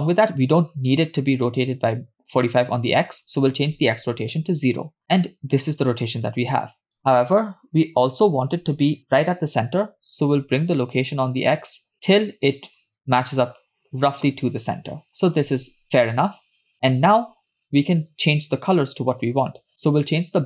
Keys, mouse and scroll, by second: 2.9-4.3 drag, 10.7-15.4 shift+drag, 18.4 click, 19.2 click, 19.8 click.